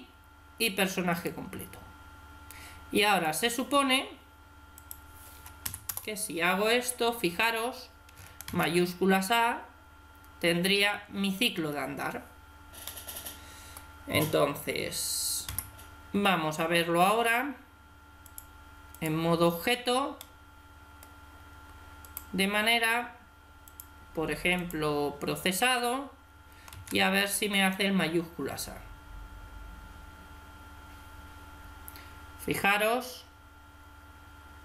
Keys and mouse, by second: 2.9-6.6 drag, 8.3 alt+a, 11.5 Escape, 12.7 middle click, 12.8 click, 13.0 click, 15.1 middle click, 15.3 Tab, 18.1-19.8 drag, 20.0-21.8 middle drag, 23.5-26.7 drag, 26.7 alt+a.